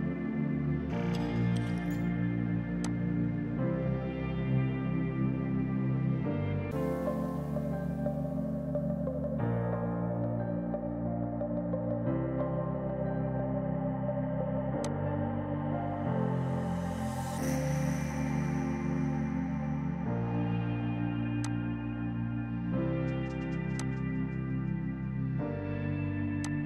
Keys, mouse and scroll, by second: 2.9 click, 10.0 typing, 14.9 click, 14.9 typing, 26.1 ctrl+z, 26.5 click.